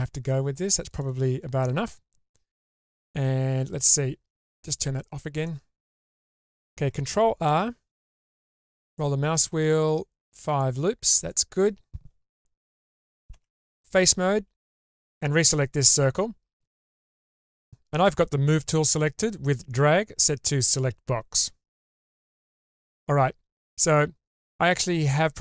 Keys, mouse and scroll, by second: 5.3 click, 5.9 middle click, 7.5 ctrl+r, 13.3 3, 14.9 click, 16.3-17.7 scroll up 1.